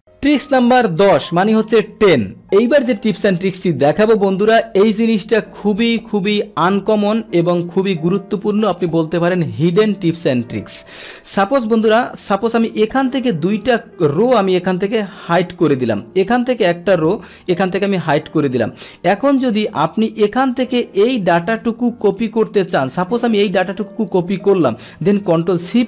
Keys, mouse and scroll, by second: 13.1 click, 15.5 click, 16.3 click, 17.4 right click, 18.9 click, 19.3 click, 20.7-22.2 drag, 22.9-24.4 drag, 25.0 ctrl+c.